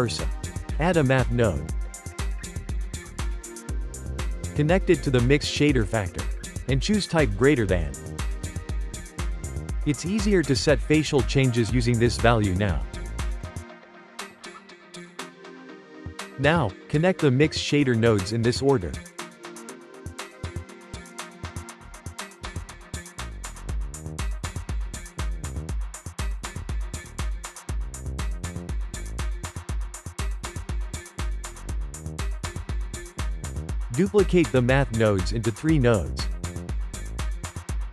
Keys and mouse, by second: 5.0 click, 6.8-12.9 drag, 14.6-15.9 shift+middle drag, 15.9 click, 17.8-19.5 ctrl+middle drag, 19.5 click, 21.7 click, 24.2 click, 25.7 shift+middle click, 26.6 click, 26.9 g, 28.9 click, 31.8-33.1 shift+middle drag, 33.1 click, 34.8 shift+d, 35.9 shift+d.